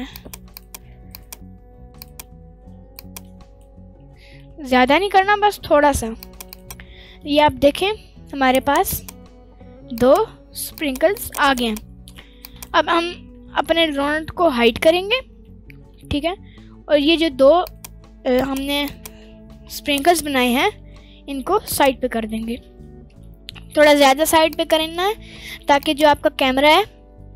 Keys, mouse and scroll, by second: 0.2 click, 0.5 click, 0.8 Tab, 1.1 click, 2.0 click, 2.6 Tab, 3.0 click, 4.3 g, 4.4 x, 6.2 click, 6.5 click, 6.7 Tab, 8.5-9.1 right drag, 10.0 click, 10.7 click, 11.1 click, 11.4-11.9 right drag, 11.9 middle drag, 12.4 shift+click, 12.9-13.7 scroll down 2, 14.0 alt+space, 14.7 alt+h, 15.4-16.5 scroll down 1, 17.6 click, 18.3 click, 18.8 shift+click, 19.6-19.9 scroll down 1, 19.9 middle click, 20.6 g, 20.7 x, 21.7 click, 21.9 scroll up 1, 22.0-22.3 middle drag, 22.5 scroll up 1, 22.7 middle click, 23.1 scroll down 1, 23.8 g, 24.5 drag, 24.8-25.4 scroll down 1, 25.4 g, 25.8 click, 27.2 middle click.